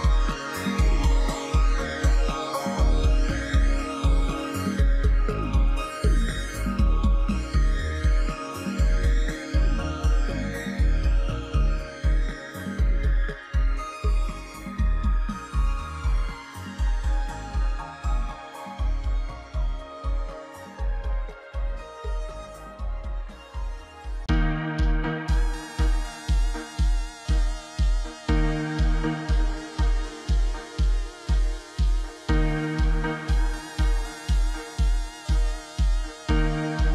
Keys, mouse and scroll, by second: 4.6 click, 14.1-14.5 ], 14.6 ], 14.7 ], 16.1 ], 16.2 ], 16.4 ], 16.4 ], 18.9 double click, 19.1 double click, 19.5 double click, 19.7 double click, 19.9 double click, 21.4-21.8 scroll down 12, 24.5 double click, 24.6 double click, 24.7 double click, 24.8 double click, 25.1 double click, 25.2 double click, 25.3 double click, 25.5 double click, 26.1 double click, 26.2 double click, 27.0 double click, 28.6-29.1 scroll up 12, 29.6 double click, 29.7 double click, 32.3-32.9 scroll down 11, 33.0-34.5 scroll up 10.